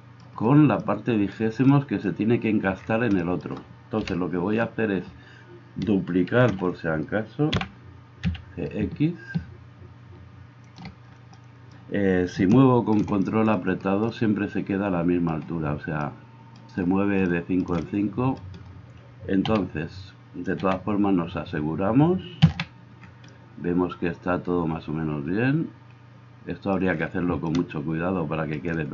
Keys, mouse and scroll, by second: 4.0 KP_1, 6.3 shift+d, 10.8-28.9 middle drag, 19.6 a, 20.7 a, 22.5 a.